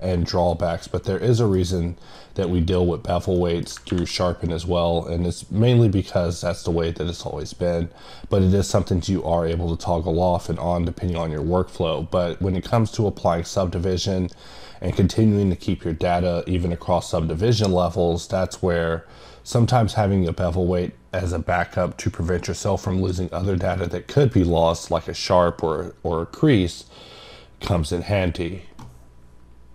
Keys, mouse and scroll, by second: 0.4 click, 1.0 middle click, 3.3 middle click.